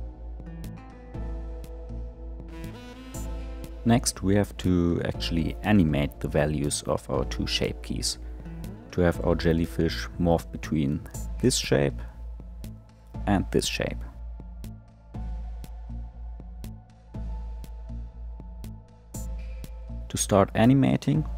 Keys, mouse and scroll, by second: 0.6 click, 2.0 g, 4.7 Tab, 5.5 click, 7.7-11.0 drag, 11.0-11.5 scroll down 3, 11.5-13.5 middle drag, 13.5-18.0 drag, 18.1-21.3 drag.